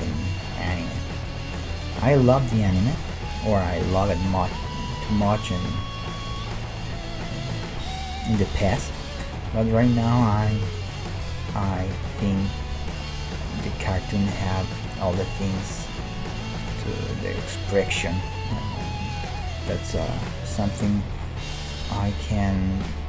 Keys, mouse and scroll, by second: 0.7 middle click, 2.3 right click, 2.7 g, 5.5 g, 6.8-9.8 middle drag, 8.4 g, 9.8-11.5 right drag, 10.2 g, 11.8-21.2 middle drag, 13.3-15.0 right drag, 14.6 g, 15.8 g, 16.7-18.5 right drag, 17.4 g, 18.8-20.6 right drag, 19.9 KP_1, 20.8 right click, 21.2 e.